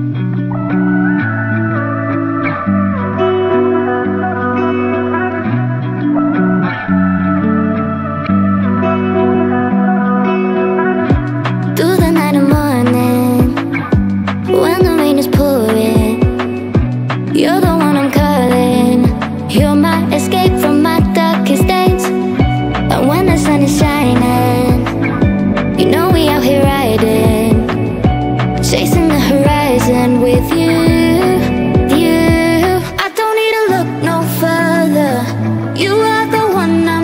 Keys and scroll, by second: 11.2 space, 14.0 space, 21.8 space.